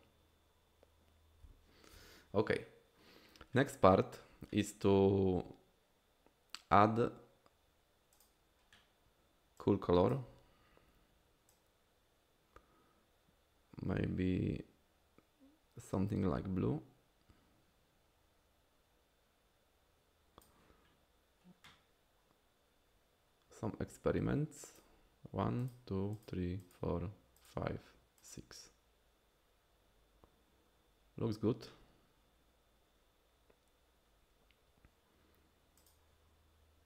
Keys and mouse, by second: 1.4 KP_Divide, 8.2 click, 24.7 click, 25.6 click, 26.2 click, 26.6 click, 27.4 click, 28.2 click.